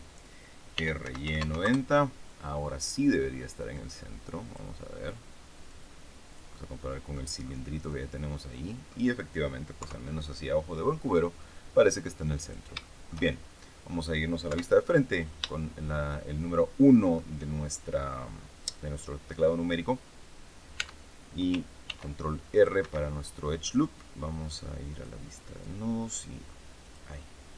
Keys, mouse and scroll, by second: 0.7 r, 1.0 y, 1.2 KP_9, 1.3 KP_0, 1.6 KP_Enter, 3.7-4.7 drag, 5.6-7.3 drag, 7.4 scroll down 1, 7.8 click, 8.1 middle click, 9.7 KP_3, 11.8 click, 12.8-14.0 shift+middle drag, 14.4 KP_1, 15.0-15.4 scroll up 3, 15.5-17.3 shift+middle drag, 20.8 Tab, 21.8 ctrl+r, 22.5 click, 22.8 Escape, 24.8 click, 26.8 click.